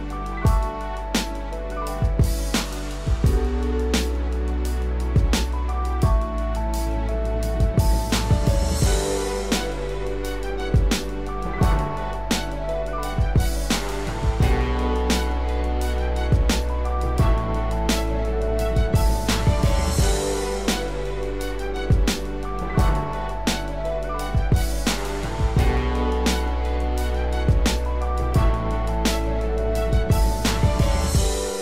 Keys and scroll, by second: 0.6 ctrl+z, 4.1 ctrl+z, 4.8 ctrl+z, 12.6 ctrl+z, 13.1 ctrl+z, 22.0 ctrl+0, 24.4 ctrl+=, 25.1 ctrl+space.